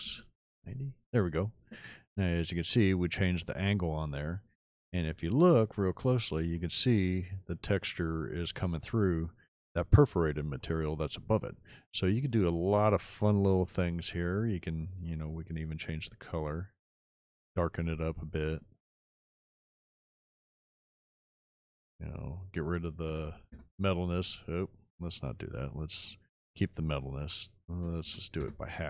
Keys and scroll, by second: 0.2 KP_0, 0.5 Return, 23.1 KP_0, 23.6 Return, 27.7 ., 28.2 5, 28.5 Return.